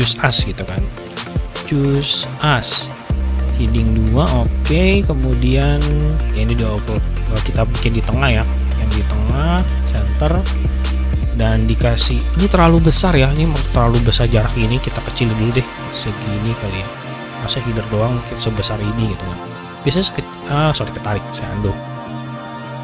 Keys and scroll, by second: 0.0-3.1 typing, 20.8 typing, 21.0 ctrl+z.